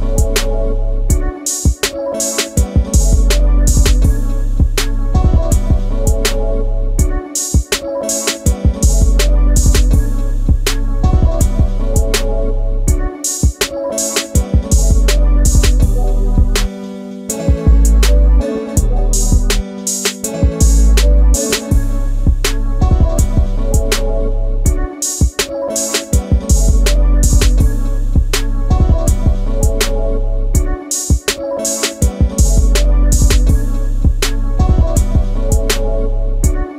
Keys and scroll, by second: 9.4 space, 20.5-21.3 typing, 25.2 alt+space, 29.9 Delete, 34.2 Delete, 36.3 e.